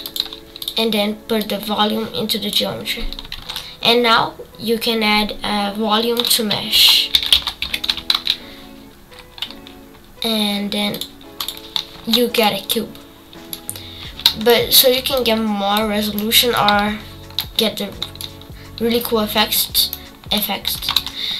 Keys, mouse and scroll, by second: 1.4-2.5 drag, 12.4-15.1 middle drag, 15.1-17.4 drag, 17.4-21.3 middle drag.